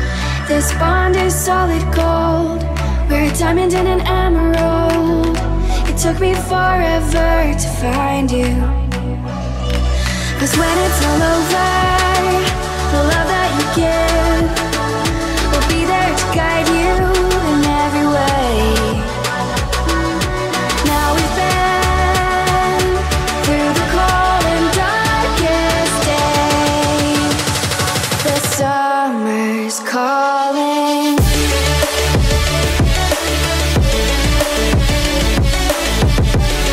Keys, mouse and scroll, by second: 0.1 middle drag, 0.4 click, 1.1 shift+z, 1.3 middle drag, 1.7 shift+z, 2.6 click, 3.0 shift+z, 3.3 middle click, 3.8 shift+z, 4.7 Tab, 5.1-5.7 scroll up 3, 5.4 middle click, 6.2 click, 7.1 Delete, 9.3-10.3 drag, 10.3 click, 10.7 click, 13.6 alt+shift+click, 15.0-16.6 drag, 18.2 click, 18.5 middle click, 19.7 s, 20.3 click, 21.0 e, 22.0 click, 22.8 e, 24.8 x, 25.3 click, 26.2 f, 26.7 middle click, 26.8 click, 27.1 middle click, 27.7 middle click, 28.3 middle click, 28.3-29.6 scroll down 4, 29.6 KP_Subtract, 32.2-32.9 scroll up 2, 33.1 shift+a, 36.5-36.7 scroll down 2.